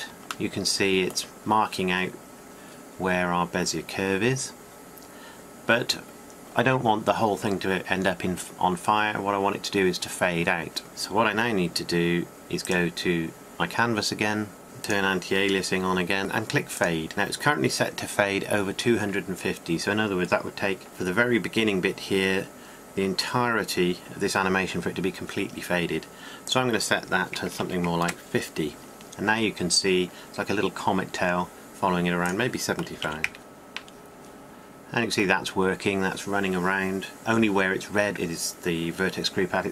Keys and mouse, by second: 0.1 click, 0.5-3.1 drag, 3.1-12.3 middle drag, 12.3-16.2 drag, 16.3-18.4 drag, 18.4-32.0 middle drag, 32.0-38.9 drag.